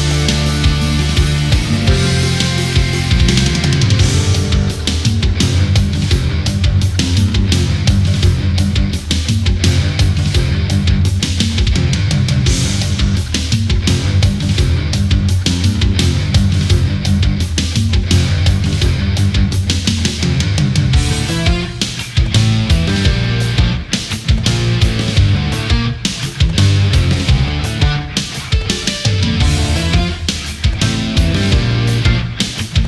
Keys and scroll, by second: 1.2 space, 2.4 ctrl+z, 3.0 ctrl+z, 5.3 ctrl+z, 7.1 ctrl+z, 8.9 ctrl+z, 10.5 Left, 11.6 ctrl+0, 11.8 ctrl+-, 11.9 ctrl+=, 20.4 ctrl+z, 27.3 ctrl+z, 28.5 ctrl+z, 29.5 ctrl+z, 30.5 ctrl+z.